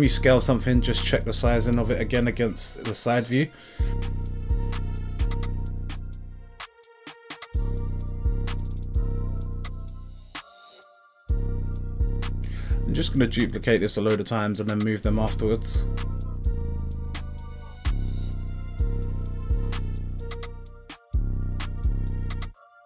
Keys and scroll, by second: 0.8 x, 6.0 z, 8.4 z, 10.8 z, 13.4 x, 15.3 z, 17.1 z.